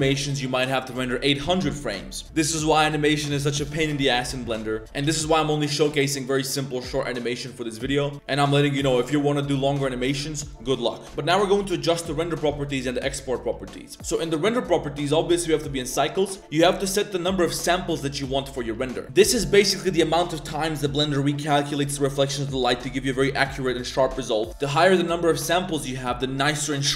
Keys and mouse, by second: 2.2-3.2 drag, 5.1-8.3 drag, 8.5-10.5 drag, 17.5 click.